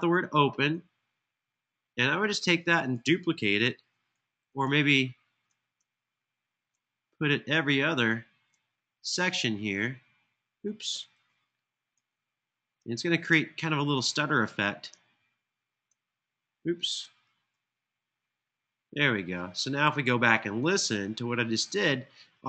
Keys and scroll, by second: 10.9 super+z, 16.9 super+z.